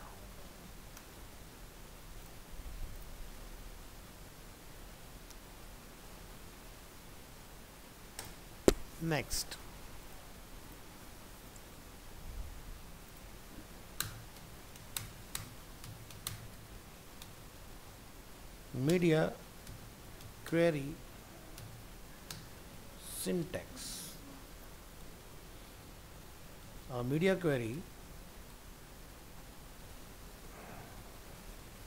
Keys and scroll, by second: 0.0 ctrl+End, 0.2 ctrl+s, 24.4 ctrl+s.